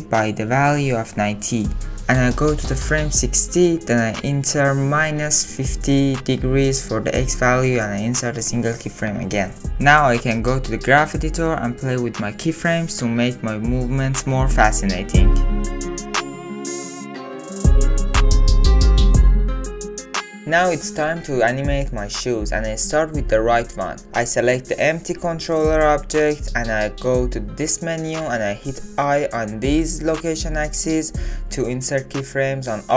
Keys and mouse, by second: 2.2 click, 3.5-6.5 drag, 8.8 Home, 9.7 ctrl+click, 9.9 ctrl+Tab, 10.1 Home, 10.1 click, 10.2-16.8 typing, 10.5 click, 10.9 ctrl+middle click, 11.9 click, 13.7 click, 13.9 ctrl+z, 13.9 ctrl+z, 14.1 ctrl+z, 14.8 click, 15.3 click, 15.9 click, 16.8 click, 18.7 space, 19.9 ctrl+click, 20.7-22.0 middle drag, 22.0 click, 22.1 middle click, 25.2 middle click, 26.5 click, 27.3 click, 29.3 i.